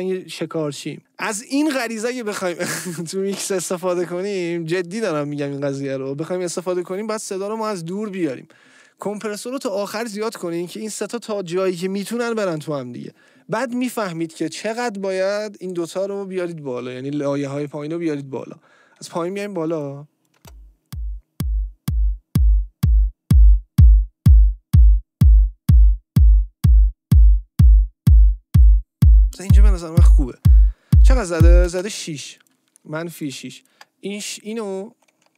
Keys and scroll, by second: 20.3 space, 32.2 space.